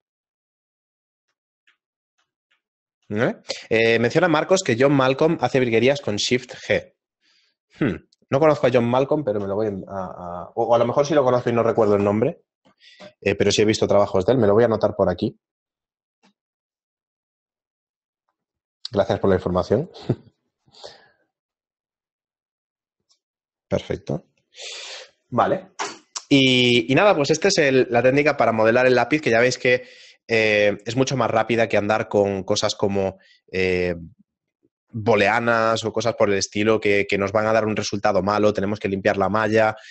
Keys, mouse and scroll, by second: 0.4 shift+middle click, 1.6 middle click, 2.2 shift+middle click, 2.4 middle click, 2.7 shift+middle click, 3.2 middle click.